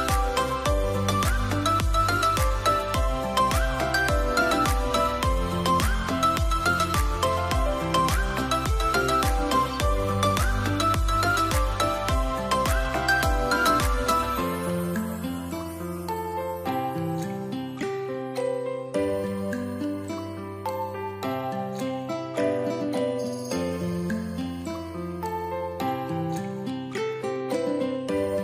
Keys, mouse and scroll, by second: 6.0 Return, 6.5 Return.